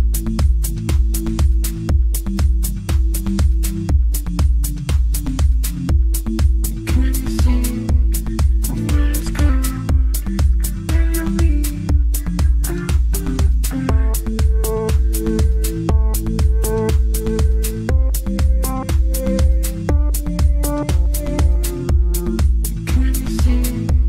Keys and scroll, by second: 1.0 g, 18.4 shift+Page_Up, 21.4 shift+Page_Up, 22.7 F3, 23.1 Escape.